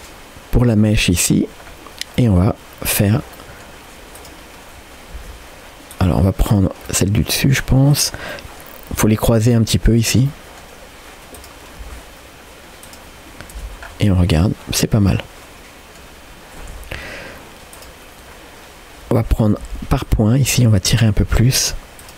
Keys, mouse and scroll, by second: 1.7-2.2 scroll down 1, 2.2 middle click, 3.0 click, 3.4 middle click, 4.2 click, 4.7-5.1 scroll up 1, 5.2 g, 6.5 click, 6.9 middle click, 7.9 click, 8.3 middle click, 9.0 g, 10.3 middle click, 11.4 click, 11.8 g, 13.2 scroll down 1, 13.6 Tab, 13.8 scroll down 2, 14.1-16.0 middle drag, 16.7 Tab, 16.9 scroll up 2, 17.8 click, 18.2-18.9 scroll up 2, 19.6 1, 20.1 click, 20.5 g, 22.0 click.